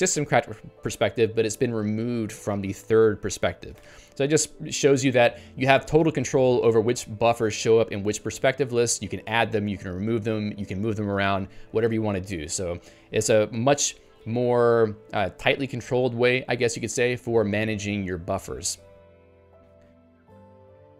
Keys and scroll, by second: 3.8 ctrl+g.